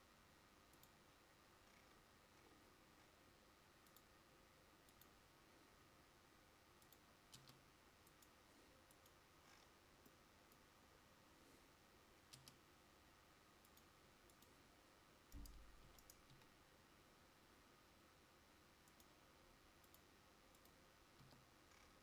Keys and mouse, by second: 7.5 Tab, 12.6 Tab, 16.0 e, 20.8 click, 21.4 Tab.